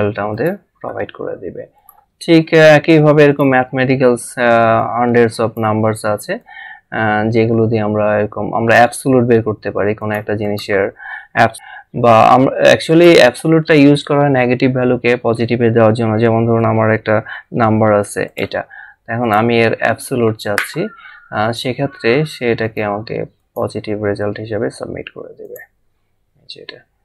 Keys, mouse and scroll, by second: 0.3 click, 3.3 click, 4.8 click, 12.9 click, 16.6 -, 22.6 click, 25.4 click.